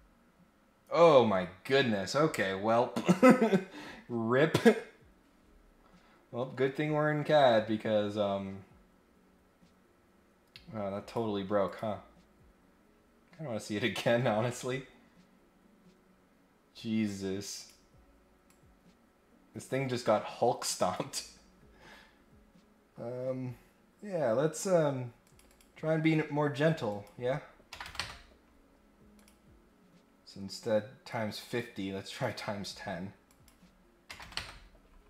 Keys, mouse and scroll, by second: 5.9-6.3 scroll down 1, 7.2-11.1 drag, 11.6 click, 17.5 click, 18.5-20.9 drag, 22.1 scroll up 1, 25.2 click, 25.5 click, 26.9 click, 29.1 click, 30.1 scroll up 1, 31.1 click, 32.1 click, 32.3 click, 33.2 click.